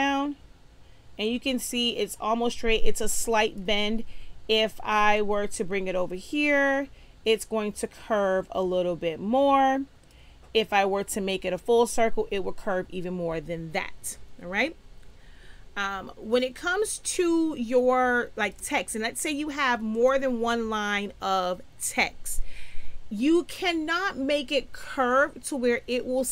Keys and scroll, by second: 16.4 space.